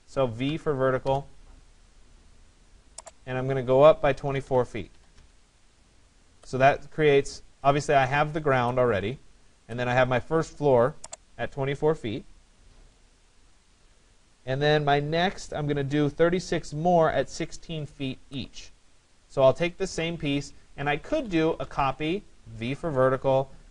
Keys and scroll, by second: 4.3 2, 4.5 4, 21.3 Return.